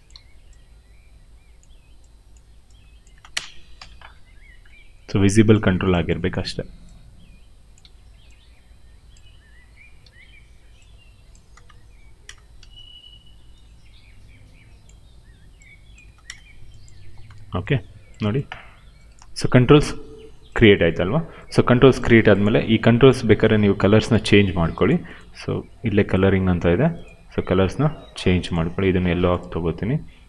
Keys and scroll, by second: 0.0 r, 2.3 w, 3.0 space, 3.7 f, 6.3 w, 7.8 r, 9.1 w, 10.0 r, 11.5 space, 12.5 w, 15.9 space, 17.2 f.